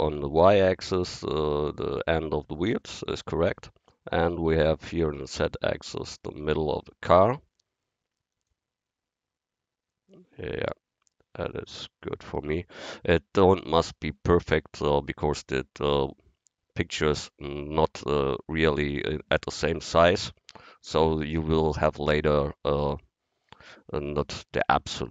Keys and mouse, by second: 3.3-5.5 middle drag, 8.4-10.2 drag, 15.8-18.0 middle drag.